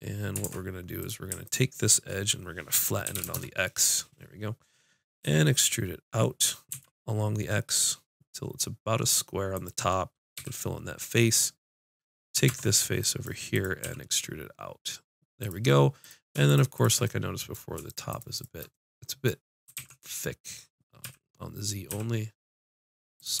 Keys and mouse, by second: 0.4 ctrl+Tab, 1.5 click, 3.2 s, 5.2 e, 9.6-11.1 drag, 10.4 f, 12.5 ctrl+Tab, 13.5 click, 13.9 e, 15.9-17.0 drag, 19.7 z, 19.8 s, 23.2-23.4 drag.